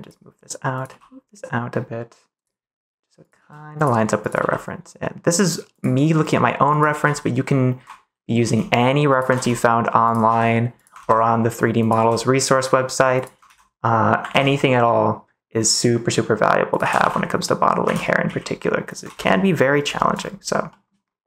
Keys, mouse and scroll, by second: 0.7 click, 0.8 g, 2.3 click, 3.3 g, 3.7 click, 4.1 click, 4.3 g, 5.6 click, 6.7 click, 6.8 g, 7.7 y, 8.3 z, 9.0 click, 9.3 ctrl+s, 10.2 g, 10.7 click, 10.9 ctrl+s, 11.8 click, 11.9 g, 13.1 click, 13.4 ctrl+s, 14.3 ctrl+s, 16.7 g, 16.9 y, 17.8 x, 18.2 z, 18.8 click, 19.0 ctrl+s, 19.3 middle click, 19.9 shift+middle click, 20.6 scroll up 1, 20.7 middle click.